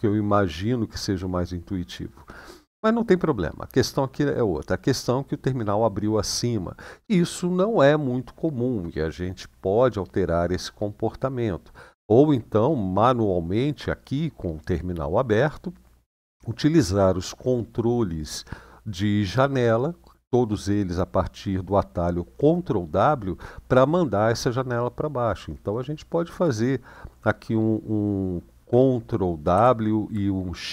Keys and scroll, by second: 29.3 ctrl+w.